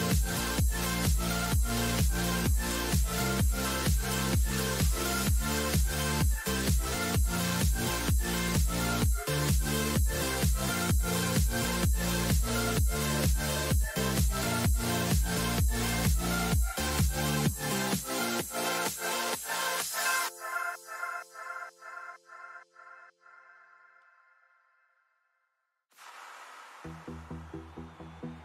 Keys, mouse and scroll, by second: 5.4 y, 8.4 a, 8.7 a, 9.7 s, 18.0-23.2 drag, 23.2 middle click, 26.1 n.